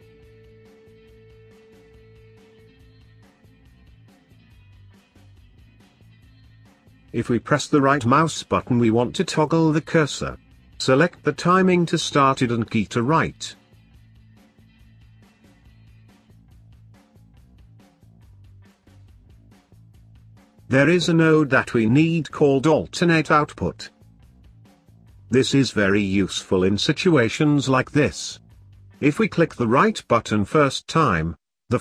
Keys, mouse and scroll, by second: 0.3-4.2 middle drag, 4.2 scroll up 2, 4.6-5.6 middle drag, 5.6 shift+a, 12.0-13.5 scroll up 5, 13.5-17.1 drag, 17.3 middle click, 18.0 click, 18.7-20.4 middle drag, 20.4 shift+a, 26.2 click, 27.3 click, 29.3 click, 30.4-31.8 drag.